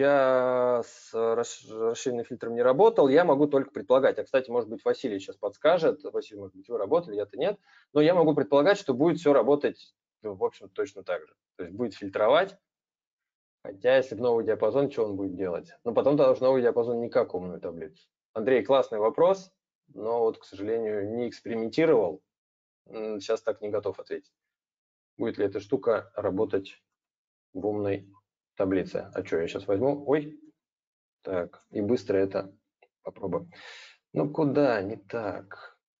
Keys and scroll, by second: 26.7 ctrl+t, 30.6 ctrl+z, 31.3 ctrl+t.